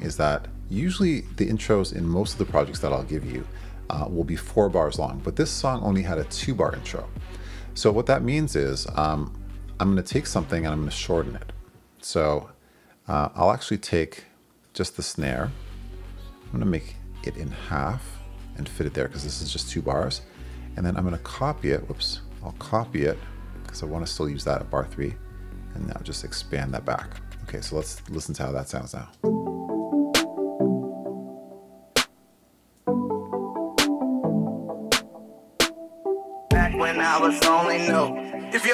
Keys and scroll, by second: 21.1 super+c, 22.9 super+c, 24.6 super+v, 29.1 space.